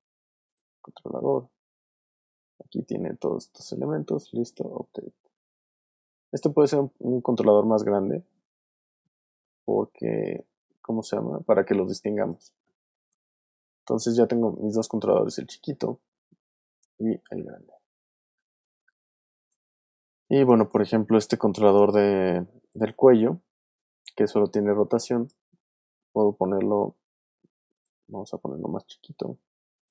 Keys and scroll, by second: 5.8 super+z, 10.9 super+z, 16.2 super+z, 18.3 alt+space, 20.1 alt+space, 23.4 w, 25.4 super+z.